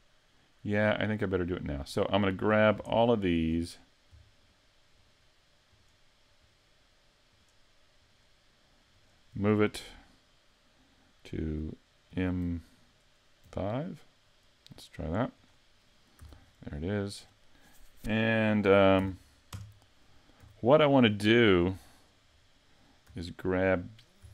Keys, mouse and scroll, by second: 1.8 right click, 2.5 scroll up 3, 2.9 shift+middle click, 3.5 scroll up 2, 4.4 shift+right click, 5.1 shift+right click, 5.7 shift+right click, 6.4 shift+right click, 7.3 shift+right click, 8.0 shift+right click, 8.9 shift+right click, 12.1 m, 15.4 click, 16.2 a, 16.5-16.8 scroll up 5, 16.8 middle click, 19.0 a, 19.5 KP_Decimal, 20.4 a, 21.1 shift+middle click, 21.9 right click, 22.3-23.6 scroll down 4.